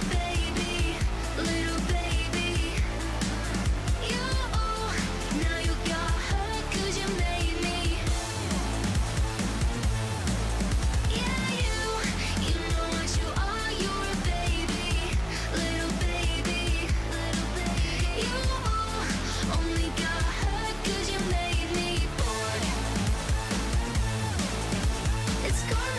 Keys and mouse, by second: 0.2 click, 1.4 click, 6.9-22.2 drag, 22.8-23.2 middle drag, 23.7 KP_1, 25.6-25.9 drag.